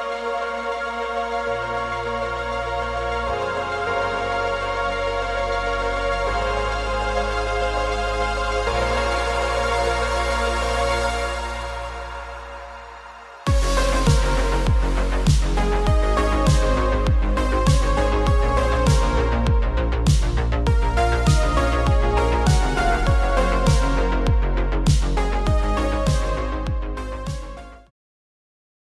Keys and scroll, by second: 0.5 v, 9.6 super+0, 10.1 super+-, 12.6 super+-, 12.9 super+-, 14.3 super+0.